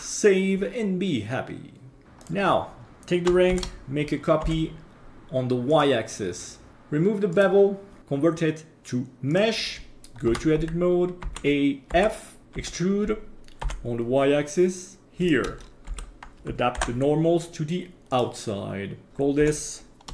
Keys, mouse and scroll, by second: 2.0 Delete, 2.2 right click, 3.5 shift+d, 6.7-7.3 scroll down 4, 7.3 click, 8.0-9.4 drag, 10.3 Tab, 11.2 a, 11.9 f, 12.5 e, 15.8 a, 16.7 alt+n, 19.1 Tab, 19.4 F2.